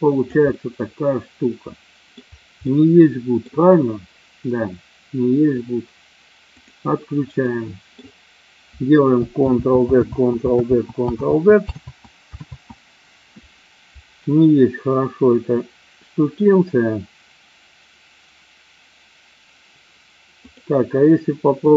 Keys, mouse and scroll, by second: 0.7-2.4 middle drag, 3.0-3.7 middle drag, 6.4 click, 7.4-8.0 middle drag, 9.4 ctrl+z, 9.9 ctrl+z, 10.5 ctrl+z, 11.2 ctrl+z, 11.7 ctrl+z, 12.4 ctrl+z, 20.4 click, 21.6 click.